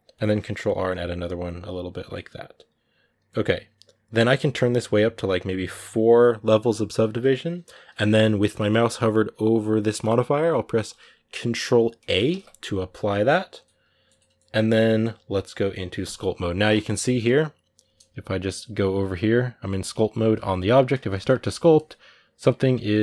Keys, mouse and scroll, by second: 0.1 ctrl+r, 1.8 Tab, 1.9-3.0 middle drag, 3.0-3.4 scroll up 2, 4.5-7.0 drag, 7.0-12.1 middle drag, 12.1 ctrl+a, 13.3 scroll down 3, 13.4 middle click, 13.9-14.6 scroll up 2, 14.6-15.7 middle drag, 15.7 click, 16.3 middle click, 16.5 scroll up 4, 19.7-21.5 shift+middle drag, 21.5 click, 22.3 middle click.